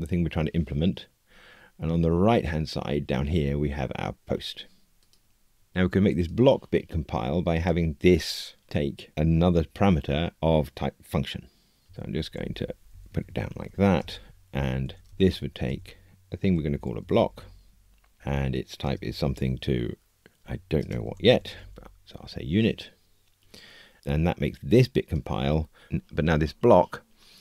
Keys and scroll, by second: 22.2 Escape.